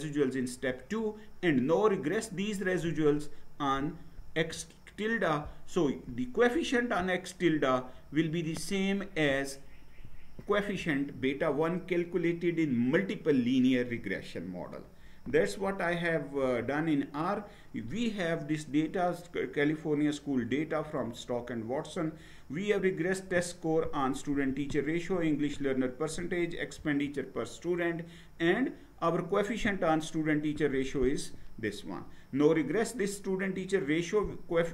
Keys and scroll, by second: 15.6 Right, 16.4 Right.